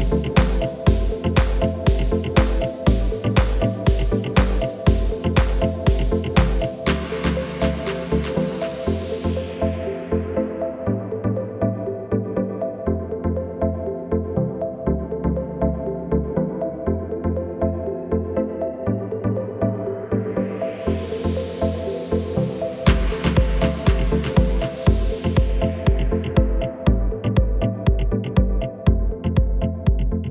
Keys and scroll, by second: 3.7 Return, 11.7 Return, 18.4 Return, 26.1 Return.